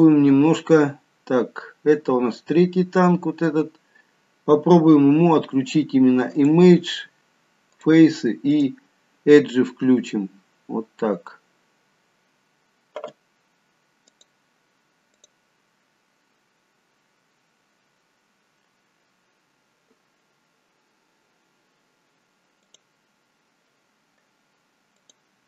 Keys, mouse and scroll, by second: 6.4 click, 7.7 click, 8.4 click, 14.0 click.